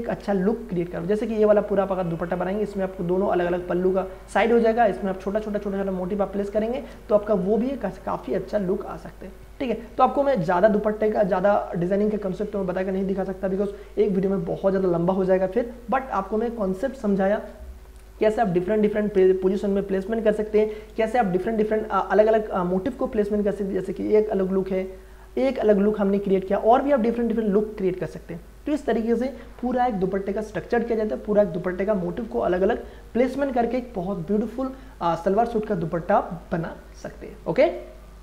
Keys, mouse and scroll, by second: 0.1 ctrl+d, 0.4 ctrl+j, 0.8 ctrl+a, 1.1 alt+e, 3.1 ctrl+d, 9.7 ctrl+e, 11.2 click, 12.7 ctrl+e, 16.3 click, 20.7 ctrl+d, 21.5 click, 23.7 ctrl+d, 24.8 click.